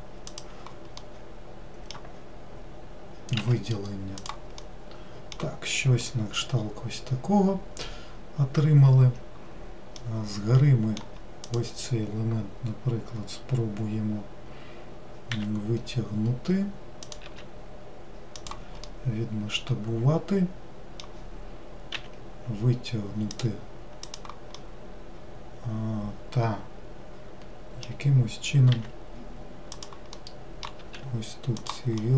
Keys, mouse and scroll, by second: 1.0-3.4 middle drag, 3.4 s, 4.6-9.1 middle drag, 10.0-11.4 middle drag, 11.4 click, 18.8-21.9 middle drag, 21.9 e, 24.0 click, 24.5-27.6 middle drag, 28.7 e, 30.1 middle click, 30.8 s, 32.0-32.1 middle drag.